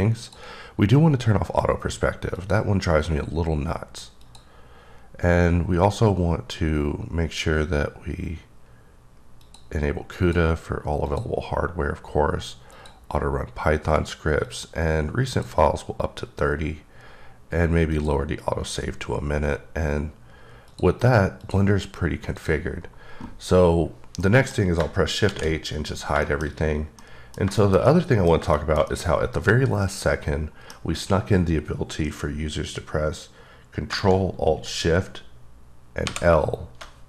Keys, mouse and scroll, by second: 0.1 click, 2.3 click, 4.2 click, 9.4 click, 10.2 click, 11.1 click, 12.7 click, 14.5 click, 17.9 click, 20.7 click, 21.4 click, 22.4 click, 23.8-24.2 scroll up 2, 24.2 middle click, 25.2 shift+h, 25.7-26.1 scroll up 2, 26.2 middle click, 26.6 scroll up 2, 27.3 middle click, 27.4 scroll down 1, 27.9-28.5 middle drag, 33.9 alt+shift+Num_Lock, 36.0 l.